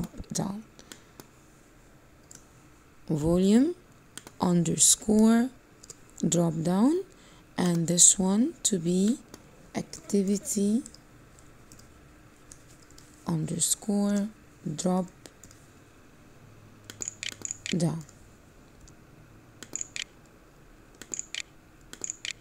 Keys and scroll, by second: 16.4-17.9 typing, 19.6 o, 19.9 o, 21.3 w.